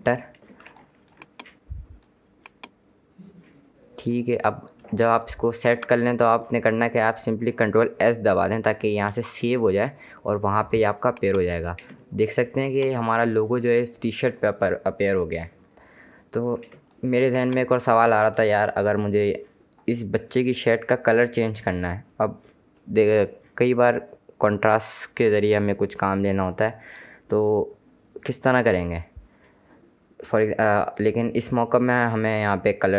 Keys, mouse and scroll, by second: 0.1 Return, 0.7 space, 0.9 click, 5.3 space, 5.4 click, 5.7 space, 9.2 ctrl+s, 10.8 click, 12.0 space, 12.4 click, 12.6 space, 16.7 ctrl+Num_Lock, 16.9 ctrl+space, 17.1 ctrl+click, 17.4 ctrl+space.